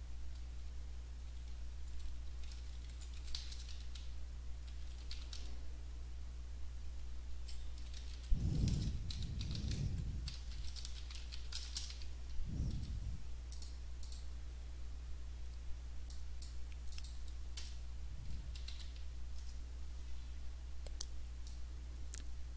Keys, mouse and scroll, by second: 2.0-5.9 typing, 7.2 Right, 7.7-12.4 typing, 12.7 Down, 13.5 click, 14.0 click, 16.1 click, 16.9 click, 17.6 BackSpace, 18.7 l, 19.0 2, 19.4 BackSpace, 21.5-22.5 drag.